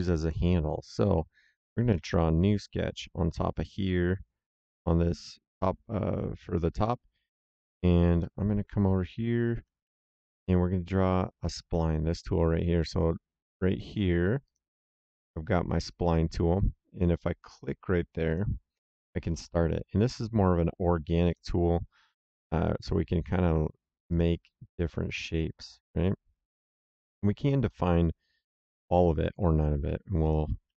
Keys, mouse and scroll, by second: 1.8 s, 2.8 click, 6.7 click, 8.1 middle click, 10.1 s, 14.4 click, 18.2 click, 21.2 click, 24.0 click, 30.1 click.